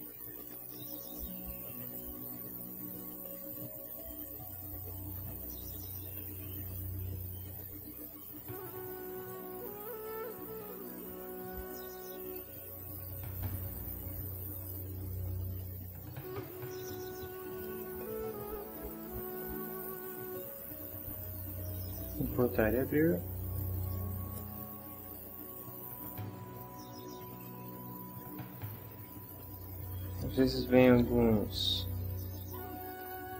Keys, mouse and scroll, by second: 1.9 click, 5.5 click, 6.7 click, 8.5 click, 9.2 f, 10.9 click, 12.3 click, 14.5 click, 16.2 click, 17.5 click, 18.9 click, 22.3 click, 23.8 click, 27.7 shift+middle click, 28.4 shift+scroll up 1, 28.5 ctrl+shift+middle click, 29.4 ctrl+click, 31.0 Delete, 32.1 click.